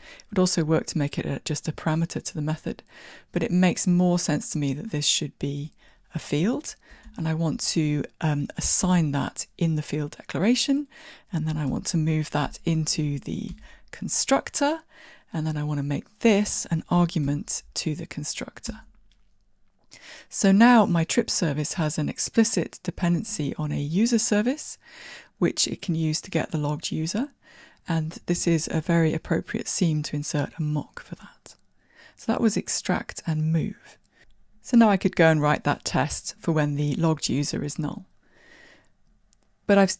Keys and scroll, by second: 7.1 alt+Return, 11.7 alt+Return, 17.3 alt+super+p.